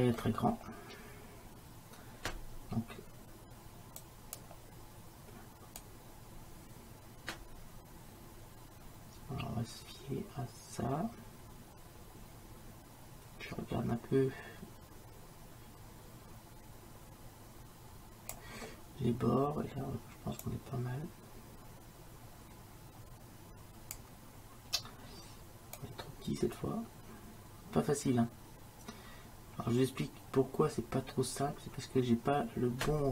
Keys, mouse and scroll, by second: 4.1-6.9 drag, 20.5-29.9 drag, 29.9-32.3 middle drag.